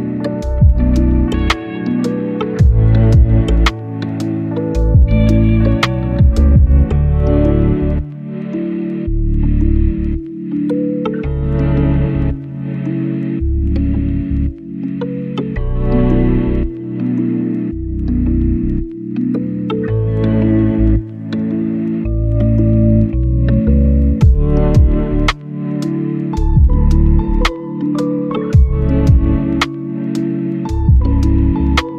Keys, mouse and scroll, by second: 4.3 click, 10.8 right click, 11.3 click, 17.0 right click, 17.4-24.7 drag, 24.7 click, 24.9 right click, 26.1 right click, 26.4 click, 27.6 right click, 28.0-28.5 scroll up 1, 28.5 click, 31.4 right click.